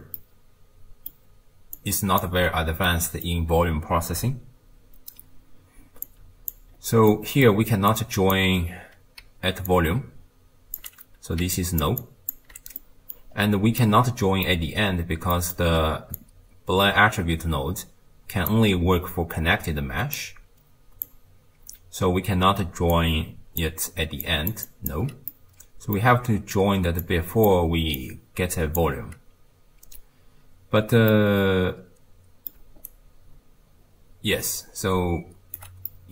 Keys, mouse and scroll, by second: 0.2-1.8 middle drag, 1.8 click, 2.4-2.9 scroll up 2, 2.9-6.0 middle drag, 6.0 click, 6.8-7.1 scroll up 1, 7.1-7.9 middle drag, 7.9 click, 9.2 d, 9.7-10.8 drag, 10.8-12.4 typing, 11.6 click, 12.0 click, 12.8 middle click, 13.4-13.8 scroll down 2, 13.8-16.2 middle drag, 16.2 click, 20.2 click, 22.4-24.9 typing, 22.9 click, 24.3 click, 24.7 click, 25.3 middle click, 26.2 d, 26.7 d, 27.0 click, 27.7 d, 28.0-28.8 drag, 28.8 d, 28.9 d, 31.1-32.6 middle drag, 32.6 d, 32.9-35.6 right drag, 35.6 d, 35.7 d, 35.9-36.1 middle drag.